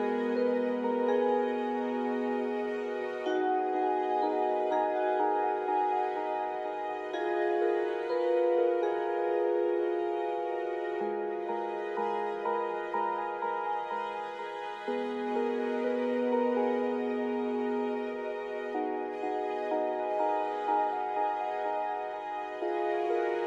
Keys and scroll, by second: 6.6 ctrl+z, 12.2 ctrl+z, 13.5 ctrl+z.